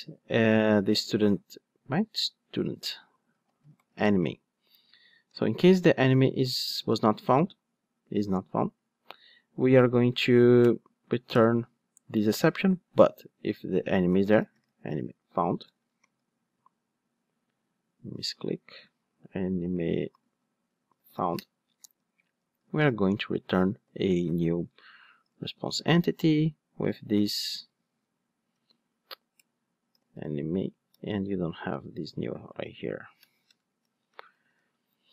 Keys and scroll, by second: 11.3 alt+Return, 23.6 Return, 24.0 Return, 29.5 Return, 33.4 alt+BackSpace, 34.4 alt+super+l.